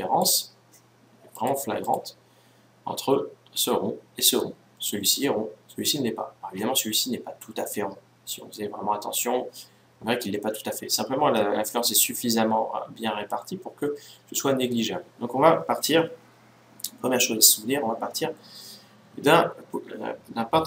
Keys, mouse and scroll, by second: 1.1-3.2 drag.